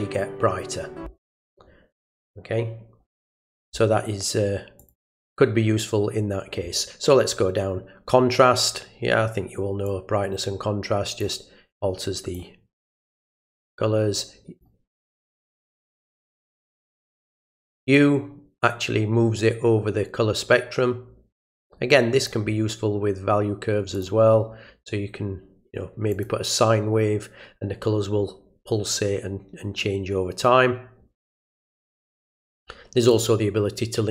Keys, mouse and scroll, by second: 4.8 click, 9.8-11.2 drag, 11.7-12.3 drag, 13.4-14.6 drag, 16.7 click, 17.9-22.3 drag, 23.9 click, 26.1 click, 33.1 click.